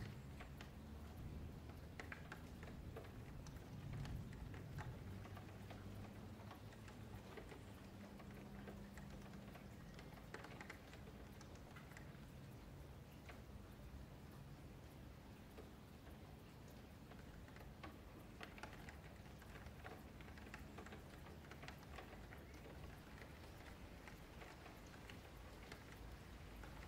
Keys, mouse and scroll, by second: 0.7 scroll down 1, 0.8-1.2 scroll up 5, 1.2-2.2 middle drag, 2.2 e, 2.9 middle click, 3.5 click, 4.4 middle click, 5.3-5.9 scroll up 9, 5.9 Tab, 6.1 a, 6.3 a, 6.3 scroll down 3, 6.6-7.6 middle drag, 7.6-8.3 scroll up 5, 7.8-8.1 middle drag, 8.3 ctrl+z, 8.9 ctrl+z, 9.7-12.3 middle drag, 12.3 ctrl+shift+z, 12.6 ctrl+shift+z, 13.1 middle click, 13.5 Tab, 14.1 Tab, 14.2 click, 14.9 click, 15.4-16.0 scroll down 6, 16.0-17.2 middle drag, 17.2 click, 18.3 a, 18.5 a, 18.8-19.5 middle drag, 19.5 scroll down 1, 19.6-20.0 scroll up 8, 20.0-20.3 middle drag, 20.3 click, 20.6 Tab, 20.8 middle click, 21.3-22.0 scroll up 4, 22.0 g, 23.4-23.8 scroll down 3, 23.8 ctrl+s, 23.9 middle click, 24.3-25.0 scroll down 6, 25.0-25.6 scroll up 7, 25.6 f, 25.8-26.6 scroll down 8, 26.6 ctrl+s, 26.8 scroll up 5.